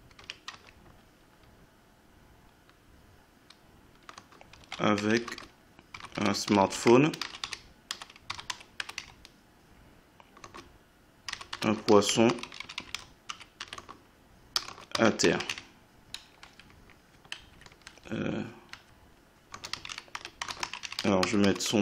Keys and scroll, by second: 0.0-0.5 typing, 4.2-15.9 typing, 16.4 Up, 17.5 ctrl+Left, 17.8 Right, 19.5-21.8 typing.